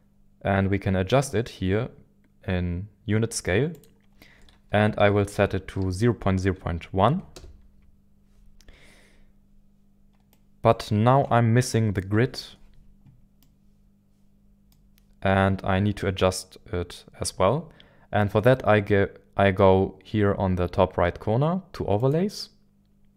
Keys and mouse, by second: 7.4 click, 10.4-10.8 right drag, 11.6-12.0 middle drag, 13.4-14.7 middle drag, 22.1-23.1 drag.